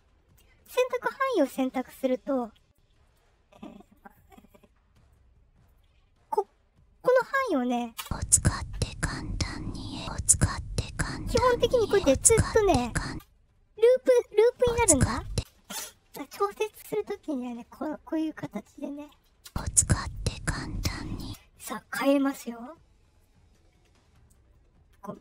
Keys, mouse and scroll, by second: 2.5 right click, 3.0 right click, 3.7 right click, 4.3 right click, 5.0 right click, 7.9 space, 13.0 space, 14.5 space, 15.2 space, 17.3 right click, 18.4 right click, 19.4 space, 20.0 click, 21.1 space.